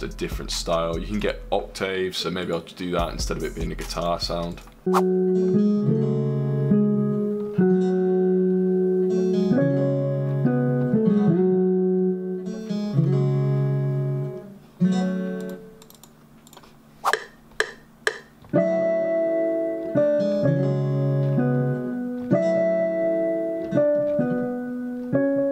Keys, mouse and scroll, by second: 2.8 F1.